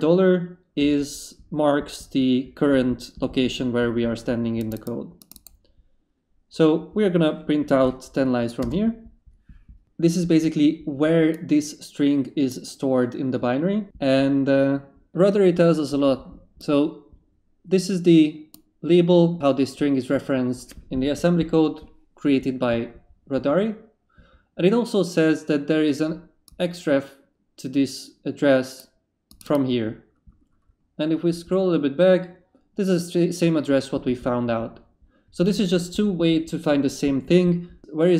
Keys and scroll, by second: 8.6 Return.